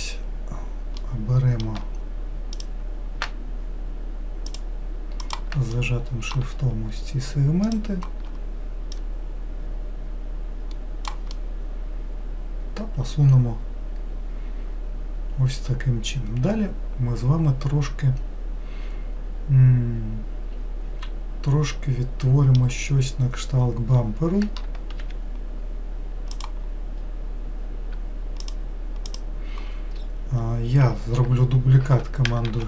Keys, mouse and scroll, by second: 0.9 scroll up 1, 1.0-2.6 middle drag, 2.6 click, 4.5 shift+click, 5.2 shift+click, 5.7-7.7 middle drag, 7.7 shift+click, 8.9 click, 11.3-14.4 middle drag, 25.0 3, 26.4 click, 28.4 shift+click, 29.1 shift+click, 32.5 shift+d.